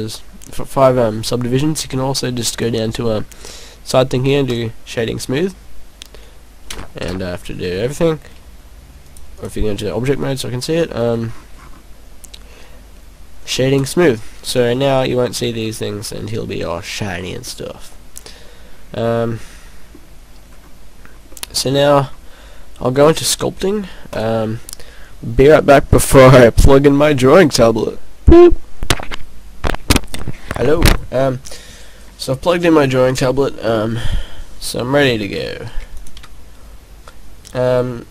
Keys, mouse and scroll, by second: 2.7-3.9 scroll down 5, 3.9 scroll down 1, 4.5 click, 5.2 click, 6.8 a, 7.1 a, 9.6 click, 11.1 scroll down 2, 11.3-11.9 scroll up 4, 12.9 scroll up 1, 14.0 click, 14.6 scroll down 2, 14.9 middle click, 15.2-16.0 scroll down 5, 17.3 scroll down 2, 20.5-21.0 scroll up 2, 21.2 scroll down 1, 21.3 middle click, 21.8 middle click, 23.0 click, 36.1 Escape, 36.1 click.